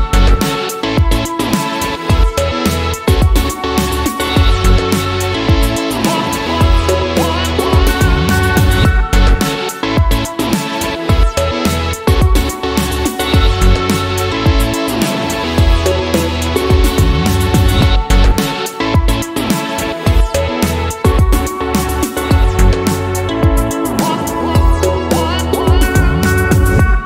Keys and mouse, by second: 1.1 r, 2.6-4.0 drag, 5.7-6.9 drag, 8.4 shift+middle click, 8.6 shift+middle click, 9.0 click, 9.3 click, 9.8 shift+a, 13.2 drag, 13.7 click, 14.3 shift+a, 15.4 drag, 15.7-16.0 drag, 16.4 click, 16.9 click, 17.3 click, 18.4 click, 21.7-22.5 drag, 22.6 click, 23.8 click, 24.5-24.9 drag, 25.1 middle drag, 25.5 middle click, 26.1 middle drag, 26.2 shift+middle click, 26.4 middle click, 26.7-27.0 drag.